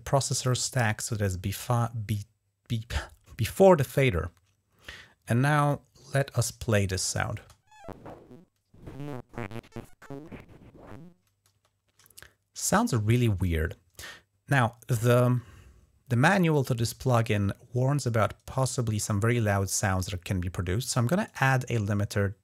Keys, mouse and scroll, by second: 5.5 click, 7.1 space, 11.3 space, 21.0 right click.